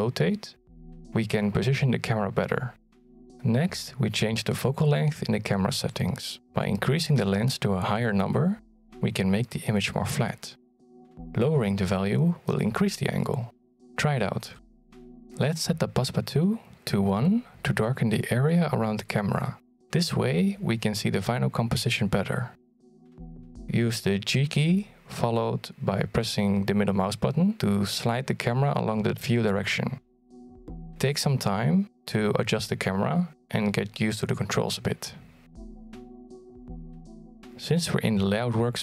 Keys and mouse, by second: 6.0 click, 9.4-13.1 drag, 14.5 click, 17.0 click, 17.6 click, 19.3 click, 20.6 click, 22.8 g, 24.9 g, 27.8-28.9 drag, 29.6 g, 30.2 g, 31.7 g, 35.8-37.2 drag.